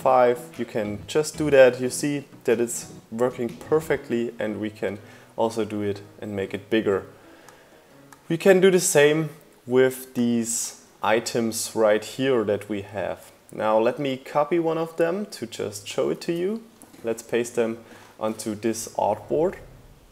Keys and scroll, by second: 12.8 super+c.